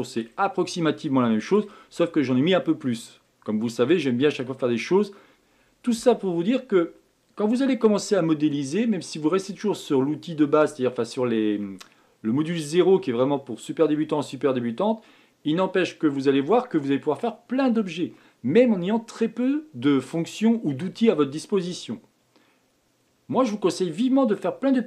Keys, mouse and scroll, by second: 0.3-0.8 scroll down 1, 0.8-3.1 middle drag, 3.1-3.5 scroll down 1, 3.5-4.9 middle drag, 4.9-7.9 scroll up 2.